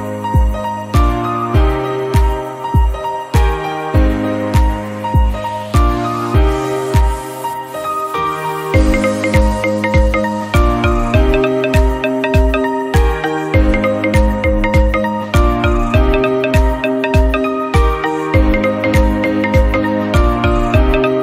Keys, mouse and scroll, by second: 0.1 s, 1.2 click, 1.3 scroll down 2, 1.4-1.9 middle drag, 1.9-2.4 scroll up 2, 2.1 middle click, 2.4-3.1 shift+middle drag, 3.1 click, 3.4 s, 4.1 middle click, 4.5 click, 4.7 scroll down 2, 4.8-5.3 middle drag, 5.3 scroll up 1, 5.4-5.9 drag, 5.9 s, 6.5 middle click, 6.8 click, 6.9 scroll up 2, 7.1-7.6 middle drag, 7.6 scroll down 1, 7.7-8.4 middle drag, 8.4-9.0 scroll up 2, 8.7 drag, 9.0 shift+middle click, 9.4 Tab, 10.2 3, 10.4 shift+click, 11.9 middle click, 12.3 scroll up 2, 12.6 scroll down 1, 12.7 Tab, 13.0 Tab, 13.4 1, 13.5 click, 14.5 Tab, 14.6 scroll down 1, 14.9 click, 15.0 middle drag, 15.3 scroll down 2, 15.4-16.4 middle drag, 16.5 middle click, 16.8 scroll down 2, 16.9 click, 17.2-21.2 scroll up 2.